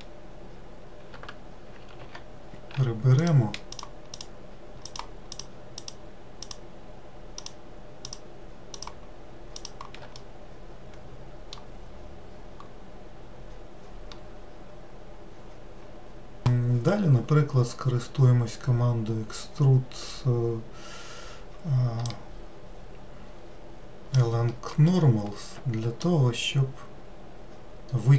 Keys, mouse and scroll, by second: 1.9 ctrl+z, 3.1 shift+click, 3.6 shift+click, 4.0 shift+click, 4.7 shift+click, 5.2 shift+click, 5.7 shift+click, 6.3 shift+click, 7.3 shift+click, 7.9 shift+click, 8.6 shift+click, 9.5 shift+click, 10.0-13.3 middle drag, 22.3-26.4 drag.